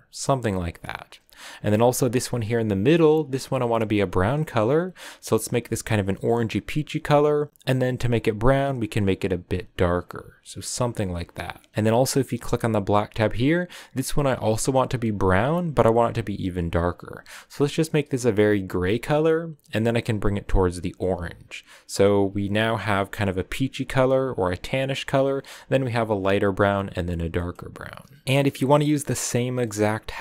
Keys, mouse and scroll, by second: 2.9-5.8 drag, 11.7-16.7 drag, 23.2-27.2 drag, 27.2 middle click, 27.5-28.2 scroll up 1, 28.2 ctrl+v.